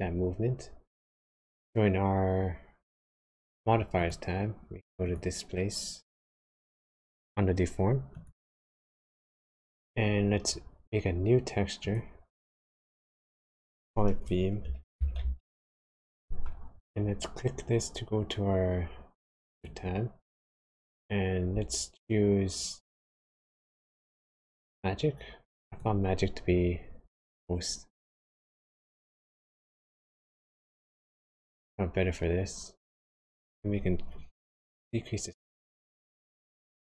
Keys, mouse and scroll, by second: 3.9 click, 5.0 click, 11.8 click, 13.5 click, 19.2 click, 20.9 click, 30.3 click, 34.5 shift+click.